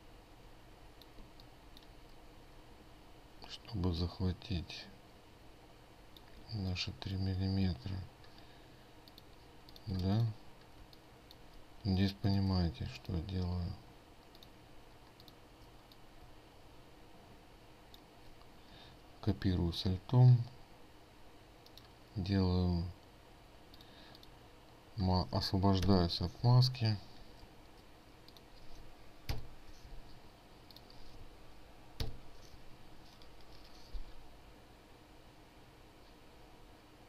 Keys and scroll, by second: 10.6 ctrl+alt+space, 26.4 ctrl+alt+7, 29.9 ctrl+alt+7, 33.0 ctrl+alt+7.